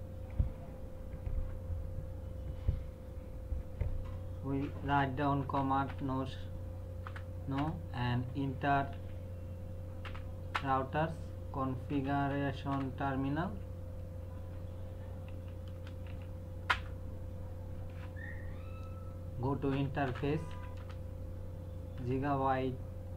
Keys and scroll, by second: 5.4-5.9 typing, 7.0 Return, 8.9 typing, 10.1 n, 10.5 Return, 11.7-13.2 typing, 15.3 f, 15.7 space, 16.1 t, 16.7 Return, 19.5-22.0 typing.